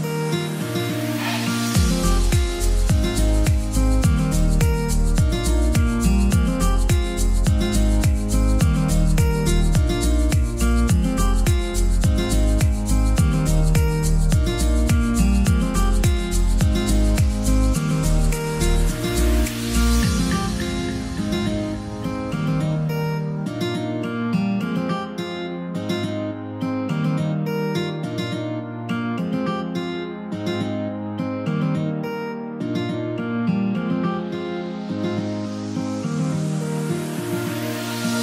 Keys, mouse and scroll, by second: 0.2 Delete, 1.1 click, 1.6 Delete, 2.3 click, 2.9 Delete, 3.4 click, 3.7 Delete, 4.2 click, 4.6 Delete, 5.3 click, 6.0 Delete, 6.4 scroll down 1, 7.0 scroll up 1, 7.9-8.5 scroll down 1, 8.5 scroll up 1, 9.7 F10, 11.2 click, 14.1-15.4 scroll up 1, 15.4-37.5 drag, 37.9-38.2 scroll down 1.